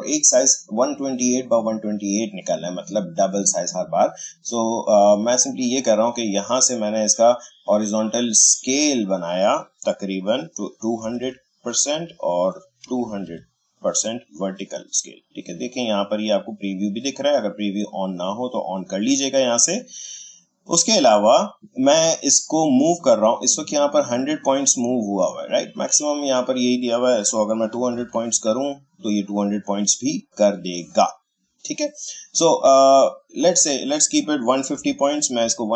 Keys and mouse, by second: 5.0-8.3 drag, 8.5-10.8 drag, 10.6-13.7 typing, 11.9 Tab, 17.8 click, 23.8-26.3 drag, 27.4-28.5 typing, 30.6-33.3 drag, 33.3 click, 34.2-35.4 typing.